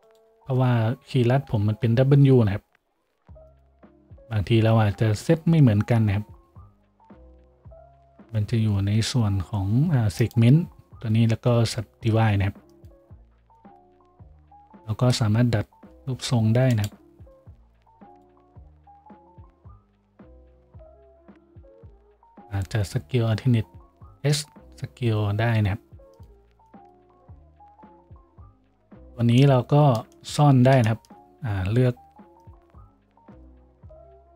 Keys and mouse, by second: 1.5 w, 14.3 z, 15.2 g, 17.7 a, 18.6 g, 20.7-34.3 middle drag, 20.7 g, 23.3 alt+s, 26.5 Tab, 27.0 a, 27.9 shift+z, 32.6 KP_Decimal.